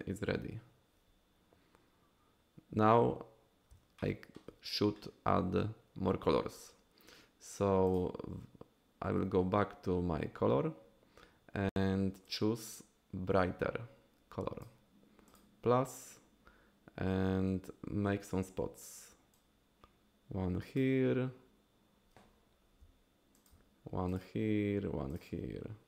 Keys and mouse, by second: 4.0 shift+click, 12.3-14.7 drag, 19.3-20.8 drag, 22.8 f, 23.4 f, 23.4 f, 24.1 click, 25.1 click.